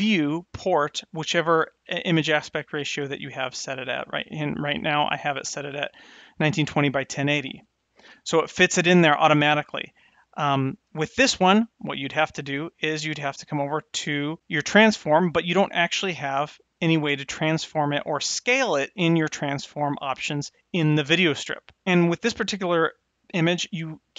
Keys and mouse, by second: 3.2 click, 19.2 click, 19.5 click, 20.6 click.